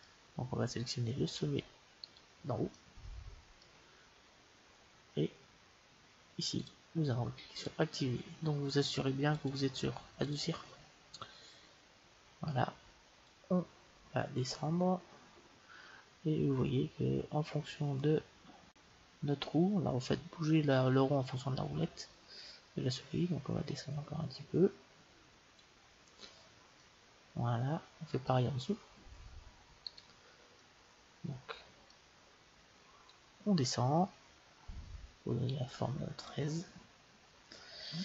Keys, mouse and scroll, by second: 2.0-3.8 right drag, 2.7 middle click, 3.8 middle click, 6.6-8.6 drag, 9.3-11.3 drag, 13.3-15.2 drag, 26.7-28.6 middle drag, 29.8-31.6 right drag, 30.5-33.0 middle drag, 33.0-34.9 drag, 37.0-38.0 middle drag.